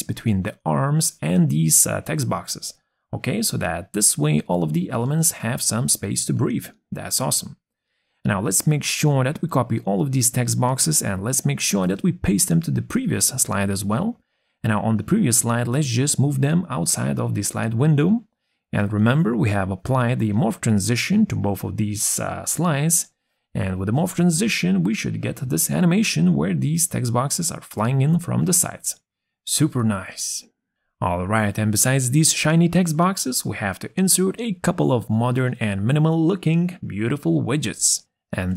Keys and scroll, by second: 9.3 ctrl+c, 11.5 ctrl+v.